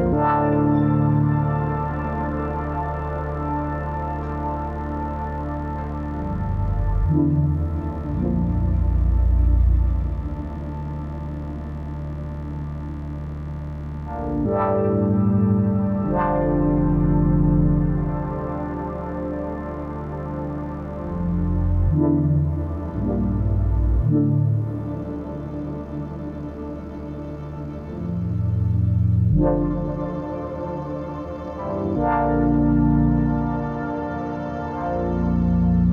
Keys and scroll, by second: 5.8 space, 26.2 ctrl+i.